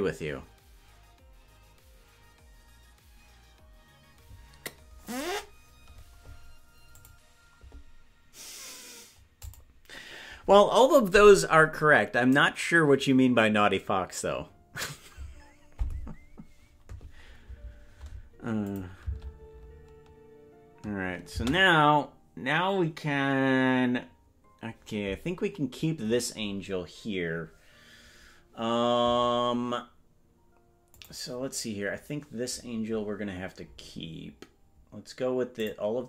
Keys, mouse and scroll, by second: 18.7 click, 21.4 space, 26.0-31.0 scroll down 2, 31.0 click, 32.4-33.6 scroll up 7, 33.6-35.5 scroll down 2, 35.5 click, 35.5 scroll down 5.